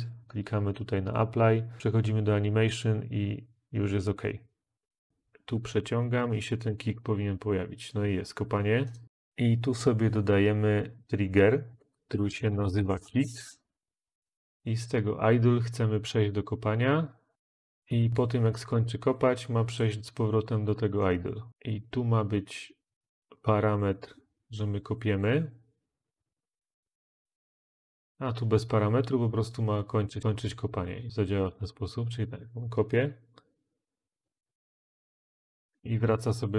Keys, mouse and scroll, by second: 12.0-13.1 typing.